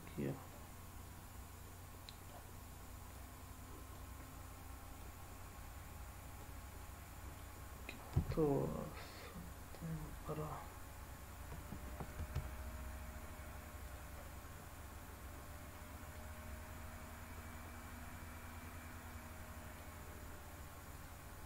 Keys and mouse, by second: 0.5-2.3 middle drag, 3.1-4.0 drag, 5.0-6.4 drag, 6.8-7.4 middle drag, 8.2 s, 10.1 drag, 12.2 g, 13.9 drag, 14.3-15.7 middle drag, 16.1-19.9 middle drag, 20.9 click.